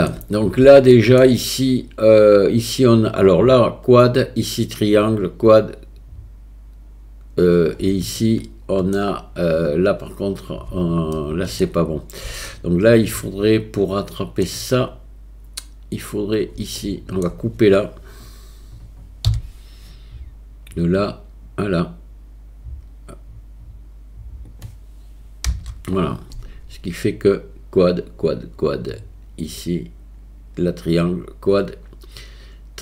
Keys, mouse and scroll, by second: 1.0 shift+middle click, 8.2 shift+middle click, 11.2 shift+middle click, 12.5 shift+middle click, 16.8 shift+middle click, 19.3 k.